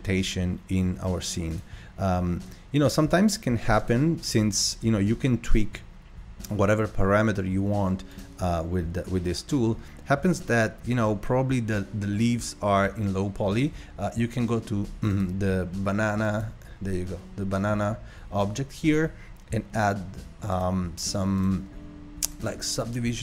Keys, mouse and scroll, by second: 1.6 click, 4.0 click, 8.2 click, 15.2 click, 16.3 click, 20.6 click.